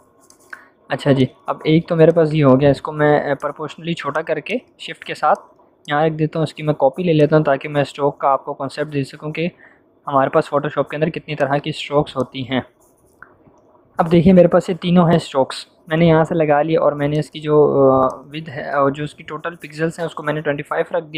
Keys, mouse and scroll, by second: 2.0-3.2 shift+drag, 5.8-6.7 alt+drag, 7.5-9.0 alt+shift+click, 10.8 click, 17.0-18.6 drag, 21.0 Return.